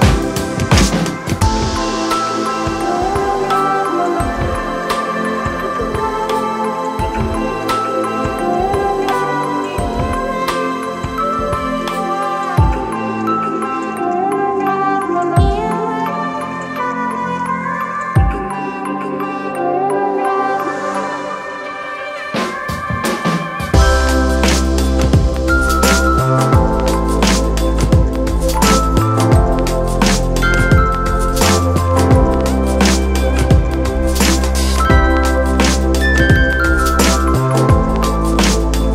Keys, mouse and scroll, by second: 35.2 right click.